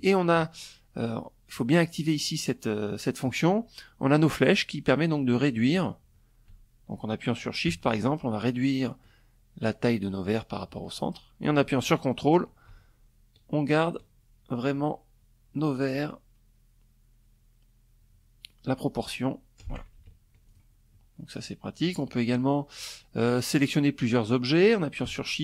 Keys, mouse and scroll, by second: 3.2-18.3 drag, 19.0 ctrl+click, 20.3 click.